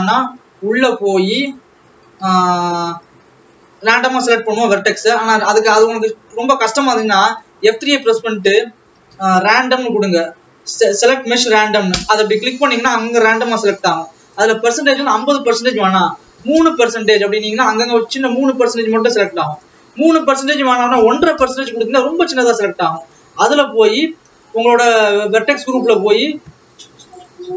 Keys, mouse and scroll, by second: 0.5 Tab, 1.3 click, 1.7-2.6 scroll up 3, 2.6 scroll up 2, 2.8 scroll down 1, 6.1-7.7 drag, 16.7-27.2 drag.